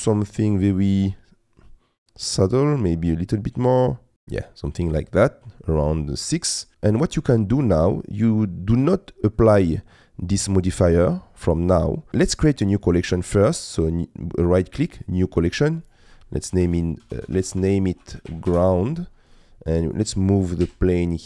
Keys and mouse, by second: 1.2-2.5 middle drag, 3.3 click, 4.3 middle click, 5.0 middle click, 5.6-6.7 middle drag, 7.0 middle click, 9.4 middle click, 12.2 click, 13.3-15.2 drag, 15.8-18.5 drag, 20.6 m.